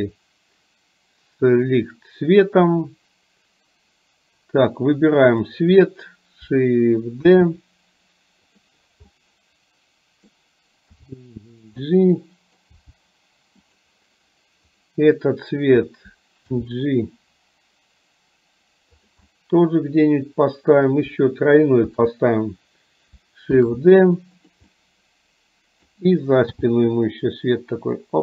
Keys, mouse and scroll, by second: 5.4 click, 7.4 shift+d, 9.3-10.4 middle drag, 11.0 g, 11.9 middle click, 12.8 g, 14.8 click, 16.5 g, 19.3-20.7 middle drag, 21.9 shift+g, 23.7 shift+d, 24.8-25.9 middle drag, 26.7 g.